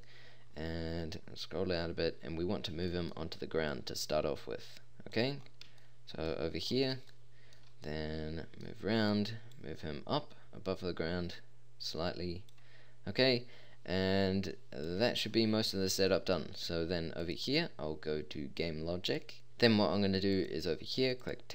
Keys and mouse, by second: 0.4-3.7 middle drag, 3.7 click, 5.4 middle drag, 11.3 click, 14.6-15.4 middle drag, 20.4-21.5 drag.